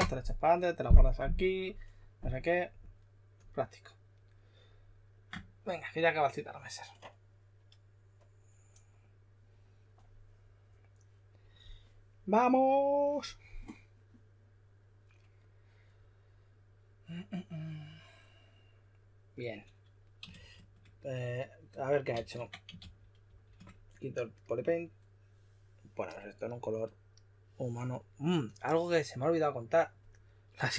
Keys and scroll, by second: 20.3 shift+f, 22.1 super+a, 22.5-23.7 typing.